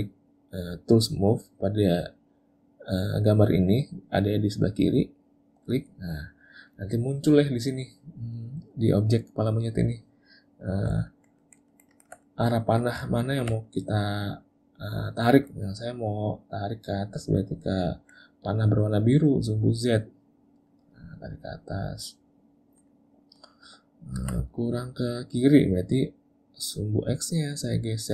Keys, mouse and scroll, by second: 5.8 click, 11.1 ctrl+middle click, 11.4 ctrl+middle click, 11.7 ctrl+middle click, 11.9 ctrl+middle click, 12.3 middle click, 13.1 ctrl+middle click, 13.3 ctrl+middle click, 13.7 middle click, 15.7 middle click, 17.8 middle click, 20.8 click, 22.3 middle click, 22.9 middle click, 27.4 click.